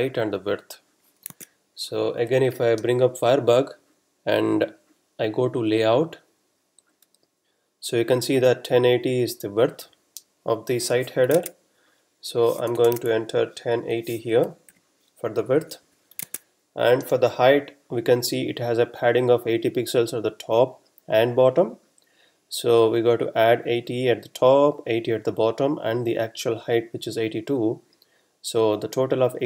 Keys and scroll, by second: 1.4 super+Tab, 11.3 super+Tab, 12.6-13.0 typing, 15.6 Up, 15.8 Left.